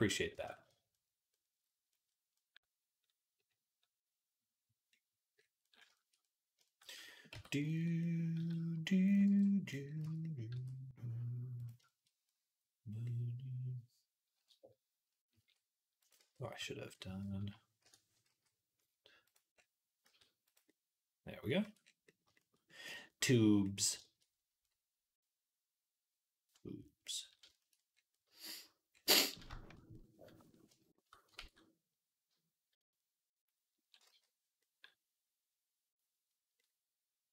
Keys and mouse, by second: 1.3-4.9 middle drag, 4.9 middle click, 6.5 shift+middle click, 7.2 Tab, 7.5 middle click, 8.2 z, 9.1 b, 9.8 z, 10.4 s, 11.6-37.3 shift+middle drag, 15.2 s, 16.0 ctrl+z, 16.3 ctrl+z, 17.2 ., 18.1 s, 19.9 s, 21.5 Tab, 31.2 ctrl+s, 33.9 z.